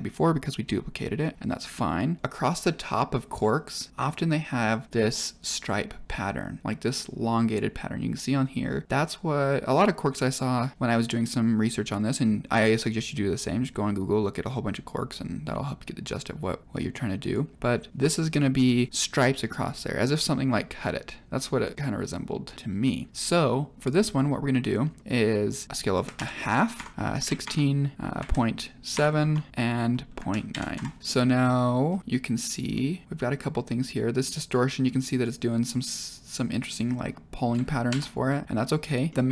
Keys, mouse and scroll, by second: 2.2-2.6 middle drag, 24.8-25.6 scroll down 1, 25.6 middle click, 25.6 click, 31.0 middle click, 31.3-31.9 scroll down 1, 31.9 scroll down 2, 32.7-33.3 middle drag, 34.2 click, 37.9 ctrl+z, 39.0 middle click.